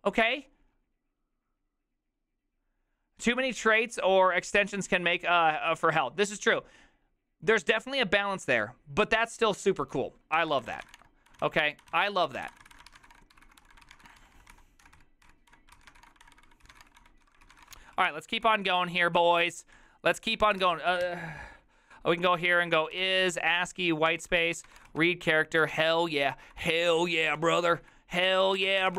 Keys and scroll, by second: 10.3-19.2 typing, 20.6 shift+c, 21.1 ., 22.7-28.9 typing, 24.1 Tab.